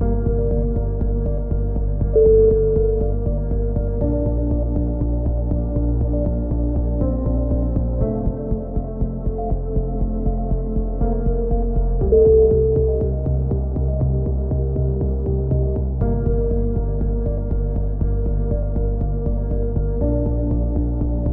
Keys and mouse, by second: 1.7 middle click, 2.1 click, 2.9-5.9 typing, 6.3 click, 8.8 KP_7, 9.3 z, 10.1 click, 11.5 ctrl+KP_7, 12.2 z, 12.8 click, 13.7 click, 14.5 ctrl+KP_7, 14.9 z, 15.4-16.5 middle drag, 16.5-18.6 drag, 19.1 c, 19.8 right click, 20.3 click, 20.6 z, 20.8-21.3 drag.